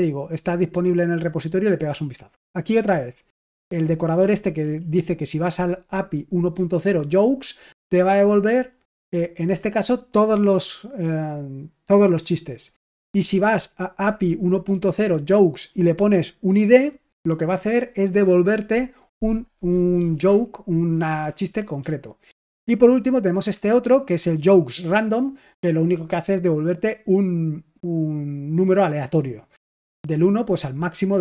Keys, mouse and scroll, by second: 0.6-4.5 typing, 7.3 j, 9.0 j, 12.1-13.2 typing, 19.9-23.2 typing, 29.0-30.5 j, 31.0-31.2 k.